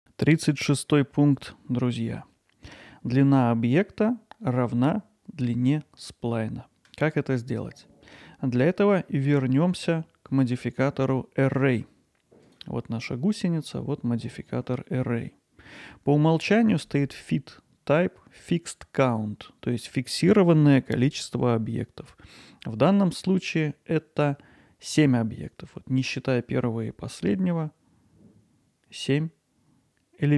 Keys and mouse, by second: 22.0-22.3 middle drag, 22.9-30.3 alt+middle drag.